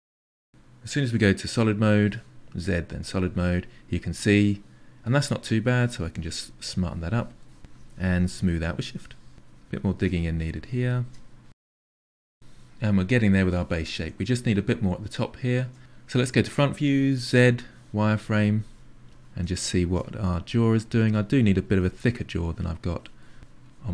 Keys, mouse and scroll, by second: 1.4 z, 1.6 middle click, 2.2 click, 2.6 middle click, 2.8 click, 3.1 click, 3.9 shift+click, 4.6 middle click, 5.0 ctrl+click, 5.4 middle click, 5.5 ctrl+click, 5.8 middle click, 6.0 click, 6.6 middle click, 6.8 shift+click, 7.3-8.5 middle drag, 8.5 click, 9.4 click, 10.3 click, 10.5 middle click, 10.8 click, 10.9 click, 11.5-16.0 middle drag, 16.0 KP_1, 17.5 z, 17.9 ctrl+shift+middle click, 18.7 click, 19.0 click, 19.6 click, 19.9 click, 20.2 click, 20.6 click, 20.9 click, 21.1-22.5 drag, 22.6 click, 22.7 click, 23.1 click, 23.4 click.